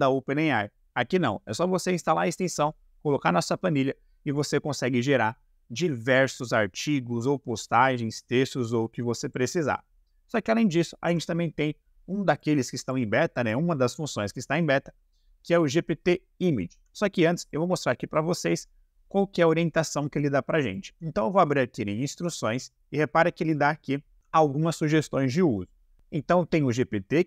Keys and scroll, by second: 11.0 Delete.